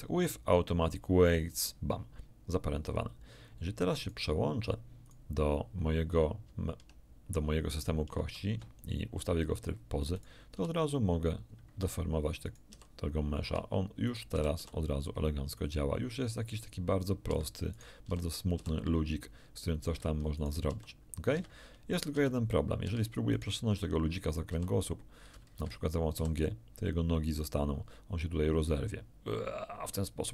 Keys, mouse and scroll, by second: 1.3 click, 3.9 right click, 5.0 right click, 8.1 ctrl+Tab, 10.1 click, 10.5 r, 11.7 Escape, 12.4 right click, 12.7 r, 13.4 Escape, 14.0 right click, 14.3 r, 17.2 Escape, 17.7 right click, 18.0 r, 18.5 r, 19.9 Escape, 20.3 right click, 20.6 r, 21.3 Escape, 21.9 right click, 22.1 r, 22.8 Escape, 23.3 right click, 24.5 r, 25.5 Escape, 26.1 g.